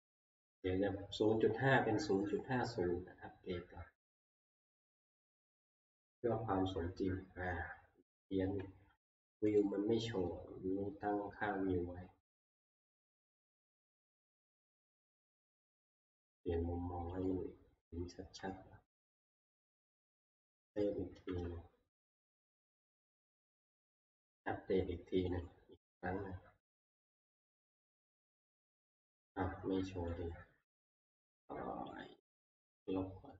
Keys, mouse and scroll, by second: 0.5 click, 2.3 right click, 4.2 click, 9.6 right click, 13.0 alt+Tab, 14.5 alt+Tab, 14.7 alt+Tab, 15.6-16.5 scroll, 17.3 click, 17.5-18.3 scroll, 19.1 middle click, 19.2 middle click, 19.6 middle click, 19.6 scroll, 20.5 ctrl+s, 21.3 alt+Tab, 22.3 middle click, 22.4 alt+Tab, 22.5 alt+Tab, 23.9 right click, 25.4 right click, 27.7 click, 28.5 click, 30.2 click, 32.1 click, 32.8 e.